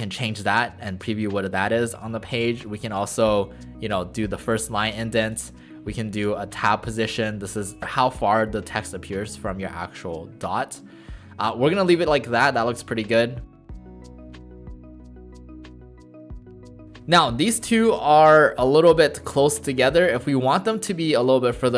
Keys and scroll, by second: 13.7-17.2 typing.